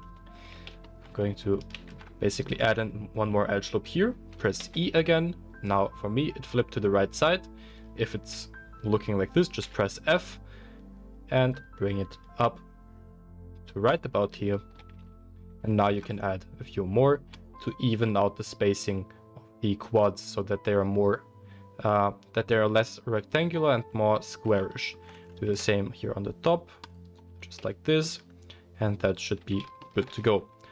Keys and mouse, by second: 0.5 Tab, 1.8 ctrl+r, 14.4-14.8 shift+middle drag, 14.9 Tab, 15.4 Tab, 15.9 ctrl+r, 25.5 ctrl+r, 27.5 Tab, 27.5-30.7 middle drag, 29.4 Tab, 30.1 Tab.